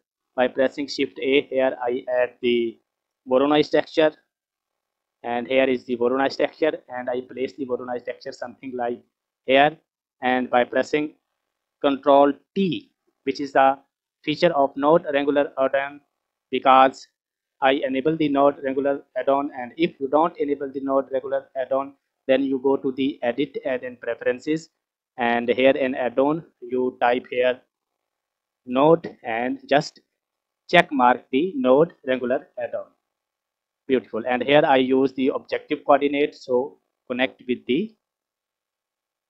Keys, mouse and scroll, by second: 0.8 shift+a, 8.6-9.0 scroll up 1, 9.0-9.7 middle drag, 9.0-9.7 scroll down 1, 12.6 ctrl+t, 13.7-14.3 middle drag, 22.8-25.1 drag, 33.6-33.9 scroll up 1, 33.9 scroll down 1, 34.0 middle click, 36.9 click, 37.1-38.1 drag.